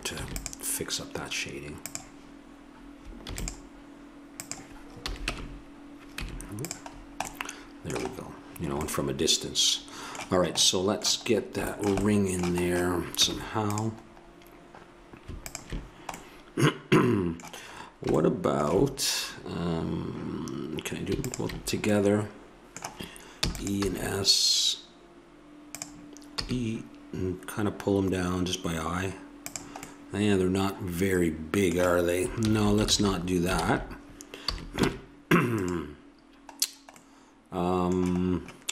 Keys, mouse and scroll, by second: 0.2 ctrl+r, 3.2 ctrl+r, 5.1 a, 5.3 Tab, 6.2 Tab, 7.1 middle click, 8.3 middle click, 10.0-11.7 middle drag, 11.9 middle click, 13.1 Tab, 15.8 click, 16.6 middle click, 18.2-19.9 middle drag, 21.2 click, 21.7-23.5 middle drag, 23.5 e, 23.9 s, 26.3 e, 30.1 middle click, 32.5 ctrl+z, 32.9 ctrl+z, 33.6 ctrl+z, 34.5 a, 34.9 ctrl+Tab.